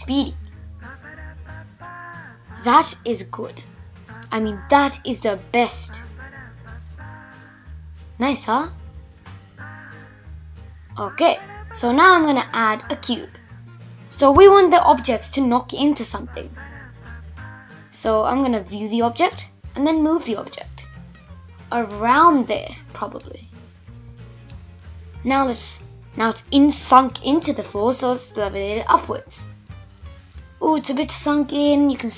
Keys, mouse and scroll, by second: 1.2-3.5 scroll down 7, 3.5 shift+Left, 4.0 space, 4.8 scroll up 1, 4.9-5.6 middle drag, 5.6 scroll down 1, 5.8 scroll up 1, 6.1-7.0 middle drag, 7.0 scroll up 1, 7.1-7.7 middle drag, 7.7-8.0 scroll up 1, 8.0-8.9 middle drag, 8.9-9.5 scroll down 1, 9.5 shift+a, 11.9 s, 14.0-15.6 middle drag, 15.6 click, 16.5 click, 17.3-18.2 scroll down 2, 18.2 g, 21.0-22.4 middle drag, 22.4-22.8 scroll up 2, 22.8-23.9 middle drag, 23.9 g, 26.7-27.0 scroll up 2, 27.0 middle click, 27.9-28.3 scroll up 1, 28.3-29.3 middle drag, 29.3 g, 31.8 middle click.